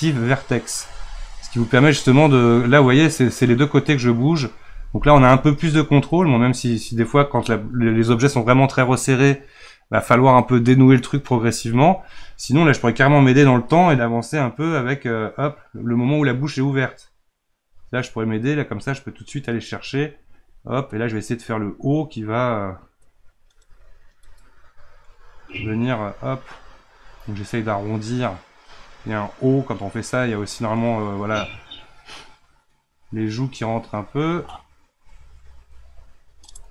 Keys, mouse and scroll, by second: 13.4-16.3 drag, 18.7-25.0 drag, 25.0-26.0 middle drag, 26.0-28.3 drag, 28.3-34.0 middle drag, 34.0-36.7 drag.